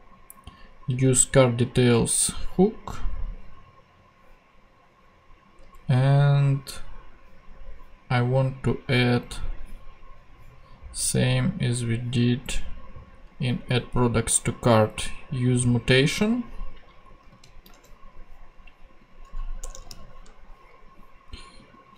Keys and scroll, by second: 17.3 super+c, 18.5 ctrl+Tab, 19.6 Return.